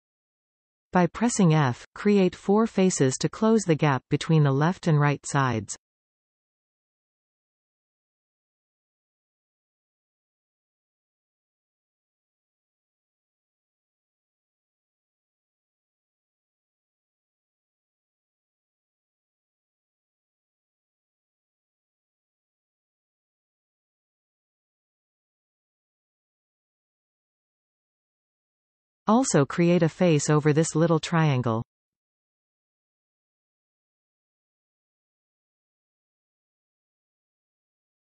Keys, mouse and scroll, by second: 0.5-1.3 scroll up 2, 1.3-2.1 scroll down 2, 2.1 alt+a, 4.1 click, 5.3 shift+click, 5.8 shift+click, 6.5 shift+click, 7.9 ctrl+z, 8.2 shift+click, 9.1 f, 9.5-10.3 scroll up 1, 10.3 shift+click, 11.8 click, 12.5 shift+drag, 13.1 shift+click, 13.9 shift+click, 15.2 f, 16.1 click, 17.0 shift+click, 17.8 shift+click, 18.4 shift+click, 19.2 f, 19.6-21.1 shift+middle drag, 21.1 click, 21.9 shift+click, 22.8 shift+click, 23.5 shift+click, 24.7 ctrl+z, 25.6 shift+click, 26.6 f, 27.3-27.9 scroll up 1, 27.9-34.2 shift+middle drag, 29.8-30.7 scroll up 2, 30.7-32.3 scroll down 1, 32.3 a, 34.9 b, 37.2-38.1 middle drag, 37.2-37.6 scroll up 1, 37.6-38.1 scroll down 2.